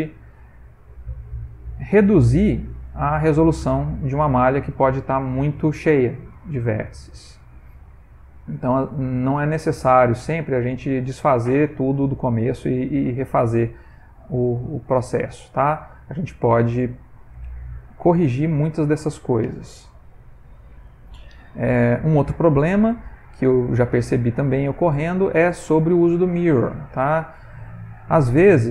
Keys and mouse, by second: 2.4 alt+click, 3.2 x, 6.0 ctrl+middle click, 6.2 ctrl+middle click, 6.4 ctrl+middle click, 6.5 middle click, 7.3 Tab, 7.8 middle click, 8.2 ctrl+middle click, 8.7 ctrl+middle click, 9.0 middle click, 9.1 middle click, 10.4 shift+middle click, 10.5 shift+middle click, 11.1 middle click, 12.9 shift+middle click, 13.6 middle click, 13.7 middle click, 13.8 shift+middle click, 14.4 shift+middle click, 15.0 middle click, 15.8 middle click, 16.9 shift+middle click, 17.7 ctrl+middle click, 18.2 middle click, 22.2 middle click, 23.4 middle click, 24.0 ctrl+middle click, 24.1 ctrl+middle click, 24.6 middle click, 24.8 ctrl+middle click, 25.0 shift+middle click, 26.0 ctrl+middle click, 26.8 middle click, 27.9 Tab.